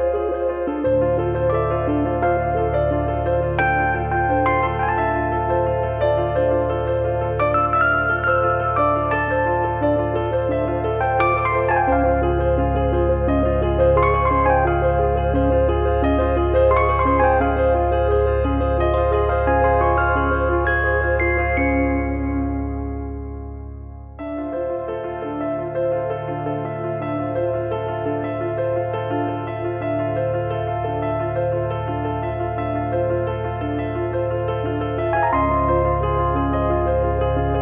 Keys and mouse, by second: 0.1 click, 4.0 middle click, 5.0 middle click, 5.4 click, 6.2 click, 7.1 click, 8.0 alt+z, 8.4 click, 8.6 alt+z, 9.1 shift+click, 10.0 click, 10.7 click, 11.3 middle click, 11.5 shift+middle click, 12.6 Tab, 12.8 middle click, 14.6 shift+h, 14.8 middle click, 18.8 click, 19.9 KP_Enter, 20.3 click, 26.6 click, 27.7 Tab, 27.8 middle click, 28.3 KP_3, 28.4 middle click, 29.4 KP_3, 29.5 shift+middle click, 31.6 KP_3, 32.8 shift+middle click, 33.0 middle click, 33.2 shift+middle click, 33.5 click, 35.6 click, 36.2 click.